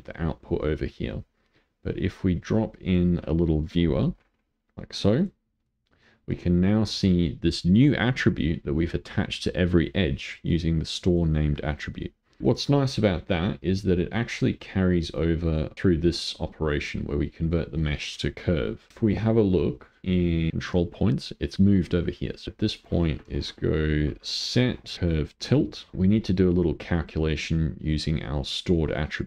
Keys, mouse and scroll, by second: 0.4-2.5 middle drag, 2.5 click, 5.6-8.6 middle drag, 10.5 click, 11.4 click, 12.4 click, 14.1-15.1 middle drag, 15.1 click, 15.7 click, 18.9 click, 20.5 click, 22.5 Delete, 22.7 click, 23.4 ctrl+shift+a, 25.9 click, 26.6 click, 27.5 click, 28.8 click.